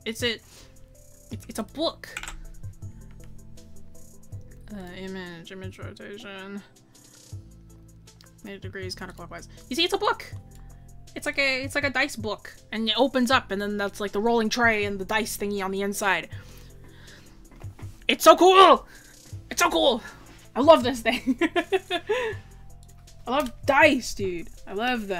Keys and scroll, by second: 5.0 scroll down 1, 12.7-13.2 scroll, 24.4 scroll.